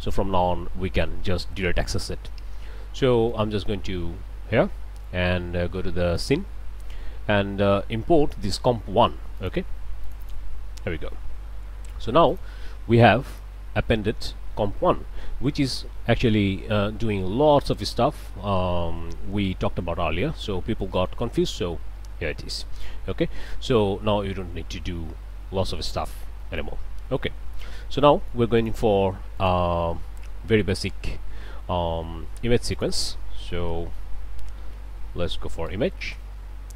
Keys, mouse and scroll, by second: 0.0 click, 3.3 click, 6.2 click, 9.4 click, 10.0 click, 12.3 click, 13.3 click, 19.5 click, 19.8 click, 20.3 scroll up 1, 20.8 middle click, 21.5 scroll up 1, 22.2 scroll up 1, 26.4 middle click, 26.9-27.9 scroll up 1, 28.0 middle click, 28.6 click, 29.4 click, 30.7 shift+click, 31.7 shift+a, 32.7 click, 33.5-34.1 typing, 35.3 Down, 35.7 Return.